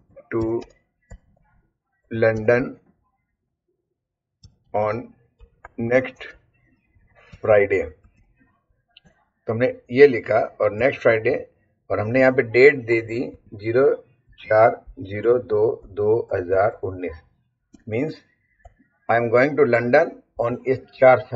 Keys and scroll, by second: 0.0-3.1 typing, 4.2-8.6 typing, 9.0 Return, 10.8 Up, 11.3 Right, 13.3-17.7 typing, 18.6 Return, 20.3 Up.